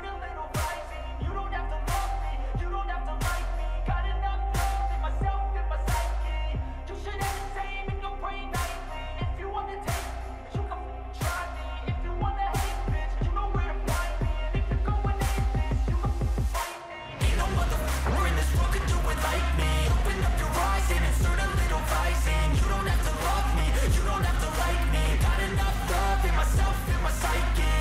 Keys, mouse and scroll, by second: 6.3 ctrl+a, 8.4 ctrl+d, 12.4 right click, 21.4 click.